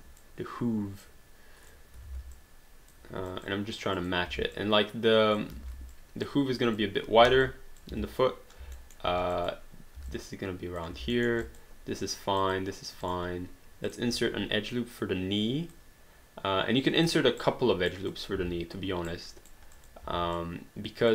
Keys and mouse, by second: 1.0 click, 1.7 click, 2.3 click, 3.4 click, 4.1 click, 4.3 w, 4.6 click, 5.6 ctrl+z, 5.9 click, 7.2 r, 7.4 click, 7.9 w, 8.8 alt+middle click, 9.3 click, 10.0 w, 10.1 click, 11.1 alt+middle click, 11.4 click, 14.9 click, 17.4 right click, 18.1 click, 18.4 w, 19.1 right click, 19.7 click, 20.0 w, 20.3 click.